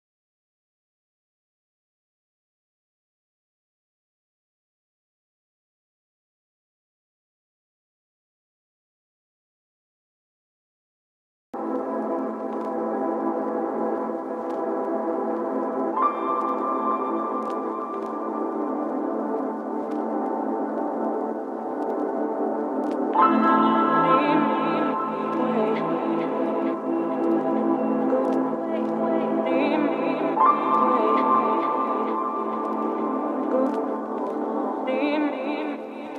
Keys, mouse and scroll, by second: 0.5-2.0 typing, 2.5 Return, 4.1-4.7 typing, 6.4-8.6 typing, 9.3 Return, 9.8 Left, 10.0 Return, 11.1-13.9 typing, 15.2-16.6 typing, 15.8 Return, 19.1 e, 19.2 l, 19.3 e, 19.4 s, 20.5-21.6 typing, 22.7 shift+h, 22.9 i, 23.0 n, 23.1 t, 23.5 Right, 23.9 Return, 24.3-27.6 typing, 28.5 Return, 29.0 Left, 29.2 Return, 30.6-32.0 typing, 33.3 shift+q, 33.5 t, 33.8 shift+., 35.2 shift+w, 35.3 shift+a.